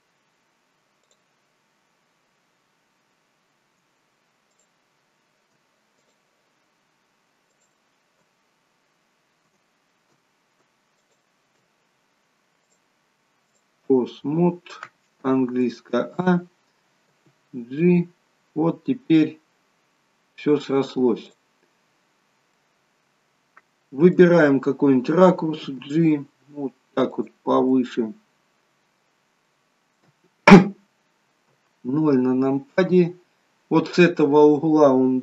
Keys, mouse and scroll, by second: 0.9 click, 4.5 shift+click, 6.0 click, 11.0 shift+click, 12.6 click, 14.4-14.9 scroll down 1, 14.9 scroll down 1, 15.2 a, 15.6 middle click, 17.0 g, 22.0 scroll down 4, 22.5 middle click, 25.7 g, 27.7 middle click, 29.4 middle click, 31.5 KP_0.